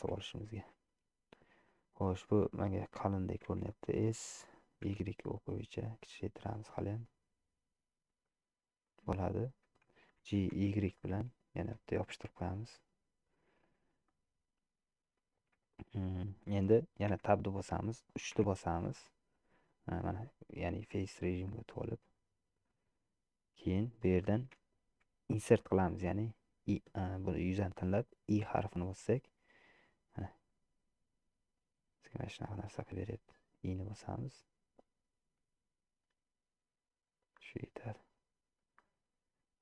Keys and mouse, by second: 0.0 g, 3.6 s, 10.4 g, 14.2 middle click, 15.8 shift+middle click, 17.3 Tab, 18.6 3, 22.2-24.0 middle drag, 24.3 shift+middle click, 38.0 middle click, 38.9 middle click.